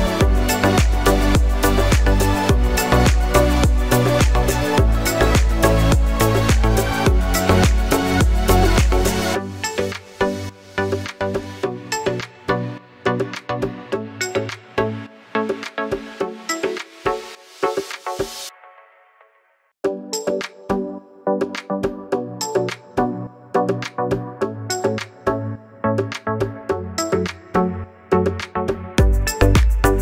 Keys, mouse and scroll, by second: 0.0 alt+right click, 1.1 click, 5.3 click, 6.3 ctrl+Num_Lock, 6.4 ctrl+j, 7.6 click, 8.4 Delete, 9.7 click, 10.3 right click, 11.2 click, 15.9 ctrl+t, 16.9 click, 18.8 click, 20.9 alt+right click, 22.4 click, 23.9 alt+right click, 24.7-25.3 alt+scroll up 2, 25.4 click, 27.6-28.2 alt+scroll down 2, 28.2 click.